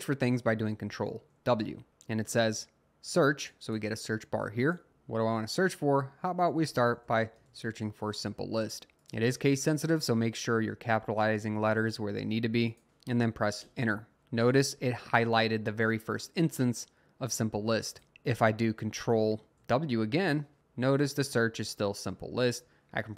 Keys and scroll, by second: 1.5 typing, 6.2-8.2 typing, 13.6 Return, 19.6 typing, 23.0 Return.